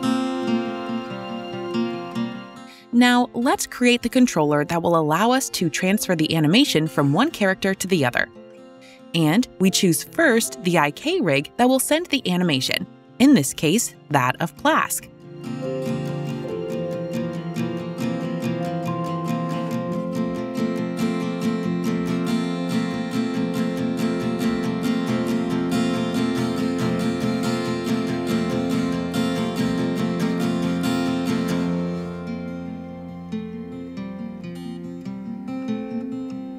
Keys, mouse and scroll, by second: 6.6 click, 11.7 click, 13.3-14.6 typing, 14.3-16.0 drag, 15.9 typing, 18.1-20.7 typing, 18.3 click, 21.6 Return, 24.2 typing, 25.0 click, 25.2 click, 26.6-29.3 scroll, 29.4 click, 34.5 click.